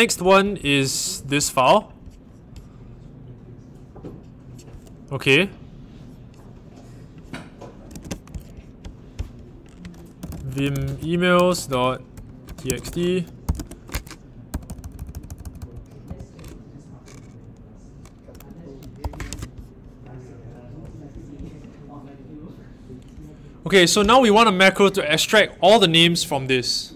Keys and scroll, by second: 7.9 super+c, 9.9-16.0 typing, 13.5 super+v, 19.0 o.